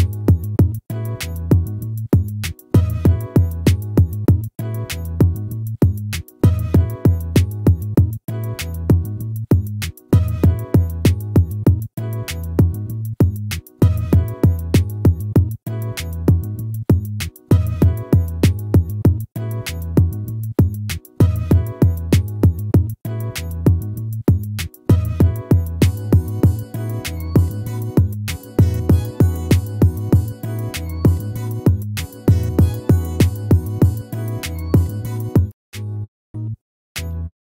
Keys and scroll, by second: 1.4 ctrl+-, 4.9 ctrl+z, 11.5 ctrl++, 13.6 ctrl+-, 18.0 ctrl++, 23.4 ctrl+z.